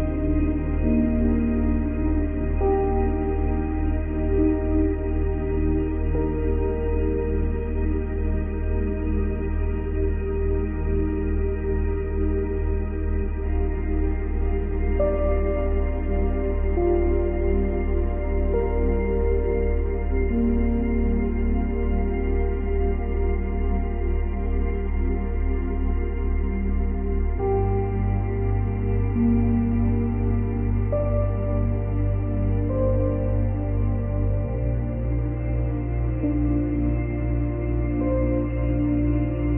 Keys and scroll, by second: 11.1 space, 19.1 ctrl+c, 19.3 ctrl+v, 27.1 space, 29.5 space.